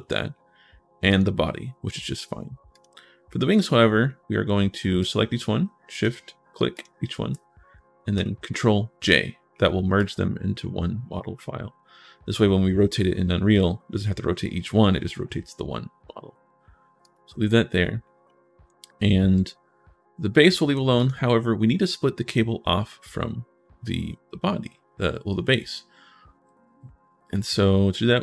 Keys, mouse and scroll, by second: 0.9 click, 2.5 click, 4.1 right click, 4.8 click, 5.7 shift+click, 6.5 shift+click, 9.2 middle click, 9.8 click, 16.8 click, 18.0 scroll up 1, 19.2 click, 20.7 click, 23.6 middle click, 27.0 middle click.